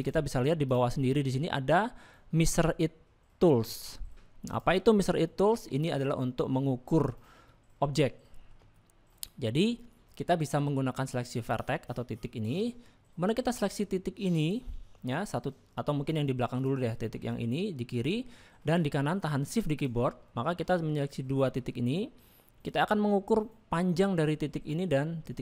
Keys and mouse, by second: 0.0 click, 4.5 click, 5.2 shift+middle click, 6.0 middle click, 7.0 shift+middle click, 7.5-8.5 middle drag, 8.7 shift+middle click, 11.4 click, 13.5 middle click, 14.4 click, 16.6 click, 16.9 middle click, 18.3 shift+middle click, 20.3 middle click.